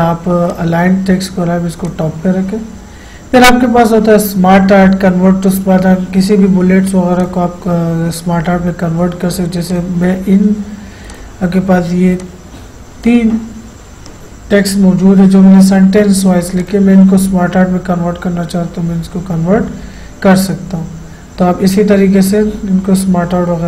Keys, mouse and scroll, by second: 7.2 click, 9.7-16.6 drag.